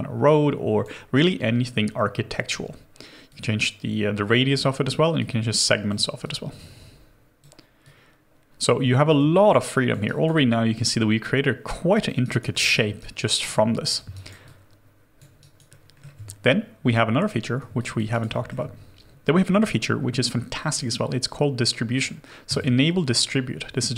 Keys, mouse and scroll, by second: 9.4 alt+click, 10.1 alt+right click, 10.4 alt+click, 12.5 alt+middle click, 13.0 alt+right click, 14.1 alt+right click, 14.5 alt+click, 15.4 alt+right click, 15.7 alt+middle click, 18.1 alt+right click, 18.3 alt+middle click, 23.6-23.9 scroll up 1.